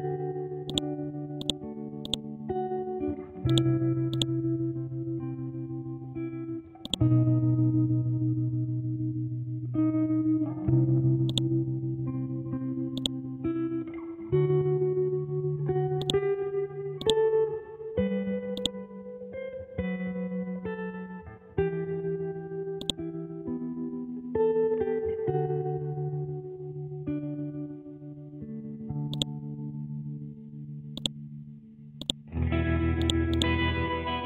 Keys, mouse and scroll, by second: 4.7 scroll down 1, 5.3 scroll up 1, 6.9 click, 11.3 click, 11.9-12.9 scroll down 1, 12.9 click, 13.9 scroll up 1, 16.0-18.3 drag, 18.3 ctrl+z, 18.5 click, 19.2 scroll down 1, 19.7-20.3 scroll up 1, 21.8 scroll down 1, 22.8-25.4 drag, 25.4 Up, 27.9 Down, 29.1 shift+click, 30.2 l, 30.5-30.9 scroll down 1, 30.9 click, 31.4-32.0 scroll up 1, 32.0 click, 33.8 ctrl+z.